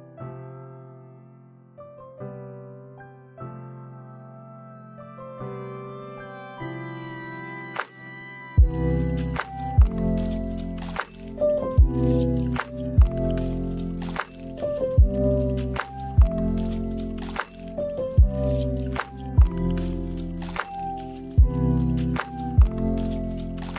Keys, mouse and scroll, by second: 3.2 click, 5.2 click, 6.5 click, 7.7 click, 9.3 space, 9.8 middle click, 11.2-11.7 scroll up 2, 11.7 middle click, 12.4 space, 12.7 middle click, 13.4 click, 14.1 middle click, 15.1 t, 16.6 click, 17.4 click, 17.7 click, 18.1 click, 18.4 click, 18.8 t, 19.2 click, 19.7-20.2 scroll down 2, 20.2 middle click, 20.2 scroll down 1, 20.4 space, 21.5 space, 22.5-23.2 scroll down 2.